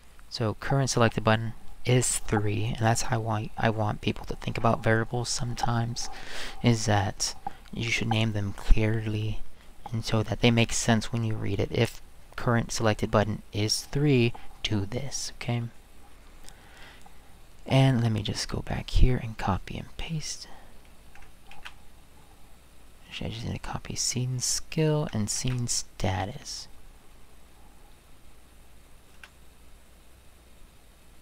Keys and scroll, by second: 21.5 ctrl+c, 25.4 ctrl+c, 29.1 space.